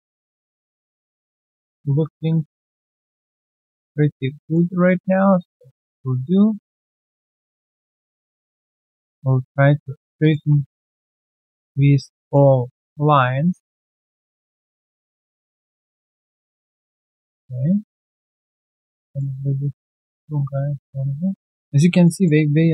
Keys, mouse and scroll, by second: 0.0 alt+click, 0.3 alt+middle click, 0.5 alt+click, 1.2 3, 1.2 alt+middle click, 1.6 alt+click, 2.0 alt+middle click, 2.3 alt+right click, 2.6 alt+click, 2.9 alt+middle click, 3.3 alt+click, 4.0-4.3 alt+scroll down 1, 4.3 alt+middle click, 4.5 1, 5.0 right click, 5.8 alt+click, 6.7 alt+right click, 8.5 alt+click, 8.8 alt+middle click, 9.0 typing, 9.2 right click, 10.6 shift+click, 10.8 shift+double click, 11.2 alt+middle click, 12.8 typing, 14.1 alt+middle click, 14.5 ctrl+z, 15.3-16.4 typing, 16.6 alt+middle click, 17.4 double click, 18.8 double click, 19.0 alt+middle click, 20.2 shift+click, 20.2 r, 21.7 alt+right click, 22.0 alt+middle click.